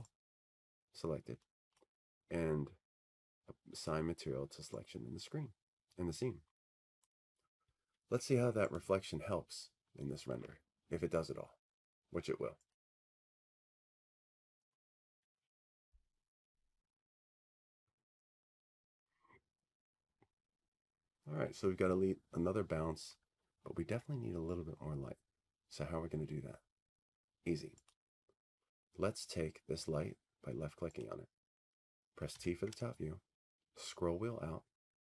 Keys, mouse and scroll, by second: 1.1 click, 2.2 click, 3.2 click, 5.6 click, 7.2 click, 9.3 click, 12.5 click, 14.5 click, 18.3 click, 20.3 click, 33.4 click.